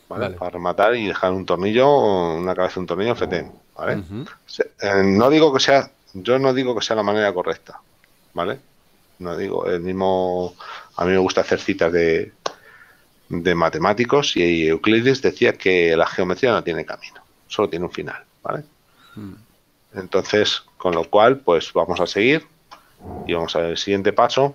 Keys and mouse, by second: 21.1 Tab, 23.7 click.